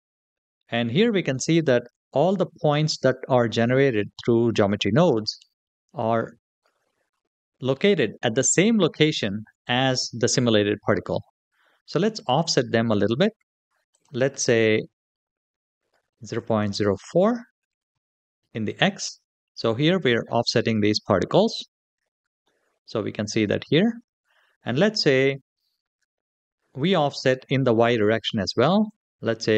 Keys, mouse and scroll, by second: 6.3-9.9 scroll up 4, 13.7-18.7 drag, 22.2-23.8 middle drag, 26.6-29.5 drag.